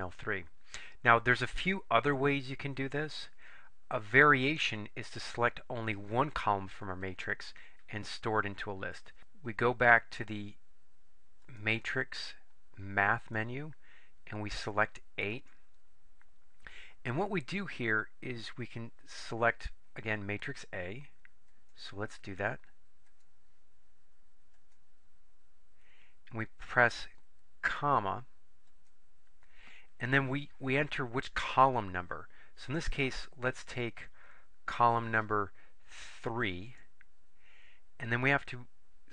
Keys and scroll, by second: 13.3 Right, 15.4 8, 24.7 Return, 28.8 ,, 36.8 3.